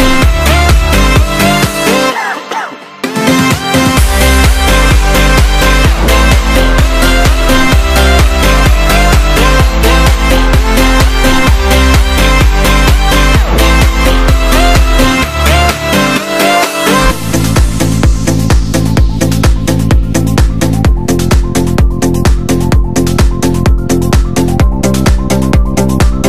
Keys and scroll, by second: 0.4 super+=, 0.9 super+=, 16.3 super+z, 22.1 x.